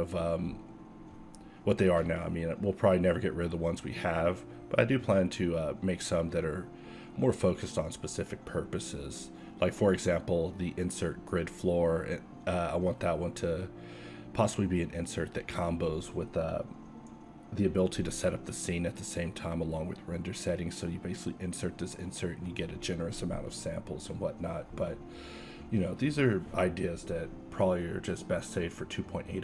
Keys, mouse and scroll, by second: 0.1 shift+d, 0.5 s, 1.9 e, 1.9 s, 3.2 a, 3.3 a, 4.1 ctrl+n, 4.6 a, 5.6 l, 5.7 p, 6.5 Tab, 6.8 z, 7.7 Tab, 8.9 s, 9.8 KP_7, 11.4 a, 12.5 e, 14.9 q, 16.9 Tab, 19.2 alt+x, 25.2 alt+x, 25.9 ctrl+a, 26.8 ctrl+a, 26.8 alt+x, 27.5 alt+x, 28.4 KP_7, 28.8 KP_7.